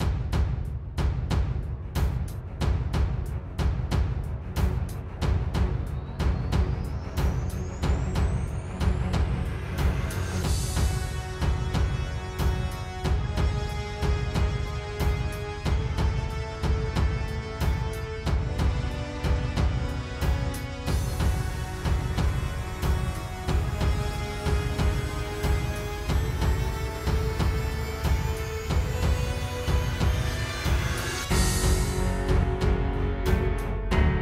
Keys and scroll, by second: 3.4 ⟲, 3.6 super+z, 3.9 super+z, 4.1 super+z, 7.2 super+g, 7.5 space, 7.7 space, 8.1 space.